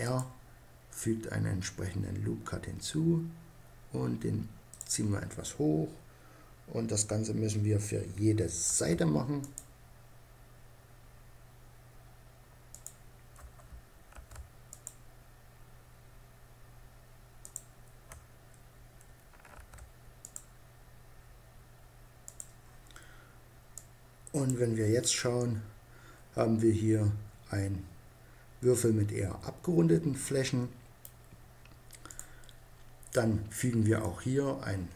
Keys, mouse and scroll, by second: 4.4-6.3 drag, 8.3 ctrl+r, 12.5 click, 13.8 ctrl+r, 14.3-17.2 middle drag, 14.3-15.1 scroll up 1, 15.1-17.0 scroll up 1, 17.0 scroll up 1, 19.2 ctrl+r, 22.0-23.4 drag, 24.1 click, 24.4-26.7 middle drag, 31.7-33.6 drag, 33.7-34.9 drag.